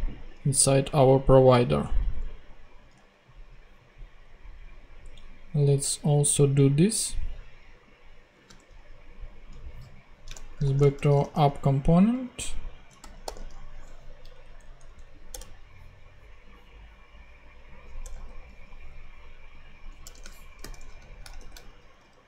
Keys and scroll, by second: 2.9 super+Tab, 8.3 super+c, 8.5 super+Tab, 10.6 shift+super+o, 10.9 shift+super+a, 11.0 p, 13.0 ., 13.3 s, 14.3 Up, 15.3 Return, 18.0 Return, 20.0 Return, 20.6-22.2 typing.